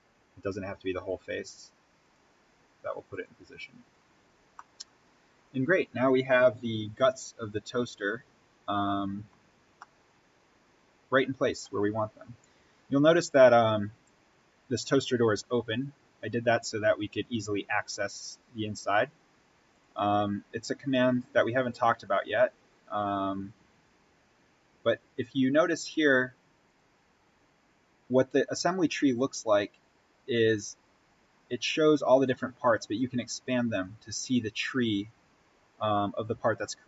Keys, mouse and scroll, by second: 1.9 click, 3.8-4.5 scroll up 1, 4.5-9.6 middle drag, 9.6 scroll up 1, 9.8-12.7 middle drag, 12.7-14.5 scroll down 1, 14.9-16.7 scroll up 1, 19.6-25.2 drag, 25.2-26.1 scroll up 1, 26.6 click, 33.6 click, 35.6 scroll down 1.